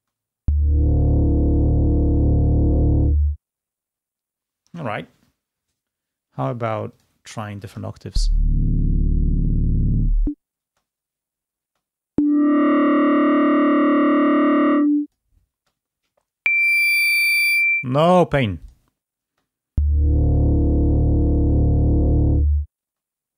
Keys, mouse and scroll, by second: 4.3 space, 7.1 click, 7.8 space, 10.0 space, 12.3 space, 15.7 space, 17.5 space, 19.0 click, 19.8 space, 23.3 space.